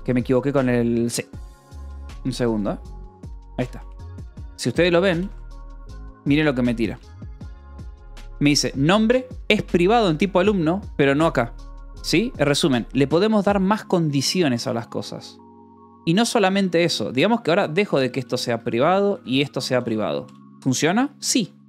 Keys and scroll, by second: 0.0-2.9 typing, 3.4 Escape, 4.6-7.4 typing, 12.0 Escape, 12.4 j, 12.7 k, 15.9-20.6 typing.